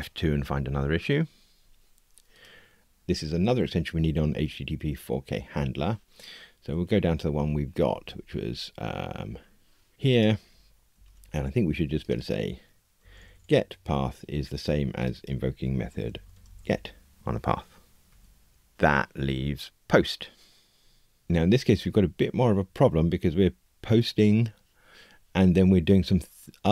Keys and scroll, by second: 0.4 F2, 10.9 super+d, 17.2 Escape, 18.0 F2.